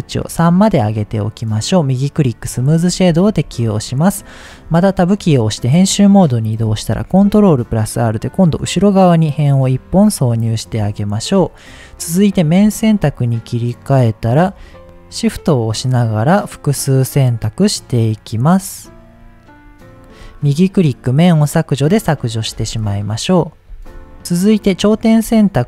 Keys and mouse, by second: 1.0-1.4 middle drag, 1.7 click, 2.6-2.9 shift+middle drag, 3.5 Tab, 4.9 shift+middle click, 7.0 ctrl+r, 9.6 click, 11.0 shift+middle click, 12.2 click, 12.7 shift+middle click, 13.5 middle click, 14.8 shift+click, 14.8 ctrl+shift+z, 15.1 shift+click, 17.5 shift+click, 18.3 shift+click, 20.0 shift+click, 20.6 click, 22.2 middle click, 23.3 middle click, 24.2 Tab, 24.8 click, 25.3 shift+middle click.